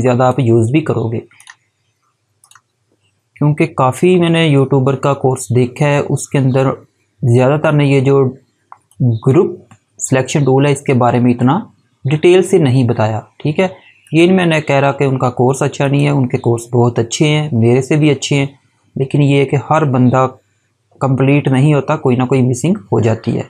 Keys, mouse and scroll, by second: 8.8 click, 13.9 click.